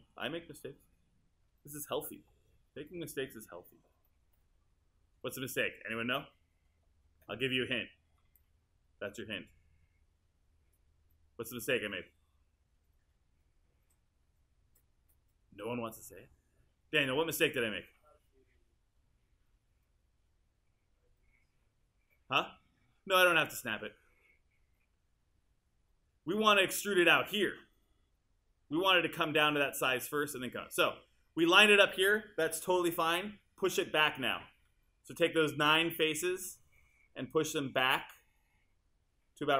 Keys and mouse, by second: 7.2 w.